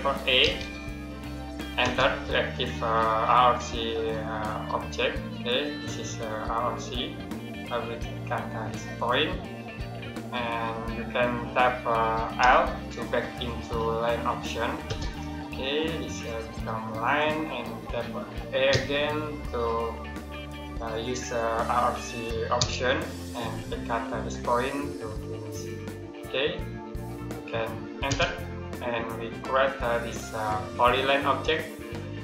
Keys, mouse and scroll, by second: 0.3 a, 1.7 space, 8.8 click, 12.3 l, 14.7 space, 16.9 click, 18.5 a, 22.4 Return, 25.4 click, 27.9 space, 30.6 click.